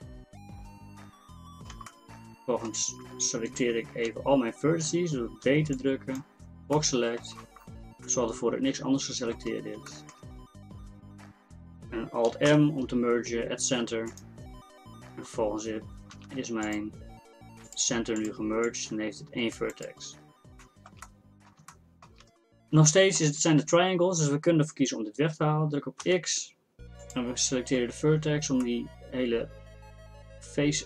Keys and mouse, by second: 3.7-5.5 middle drag, 5.5 b, 6.8-8.6 drag, 12.5 alt+m, 15.3 Tab, 15.8 Tab, 16.2 z, 16.7-19.0 drag, 26.1 x.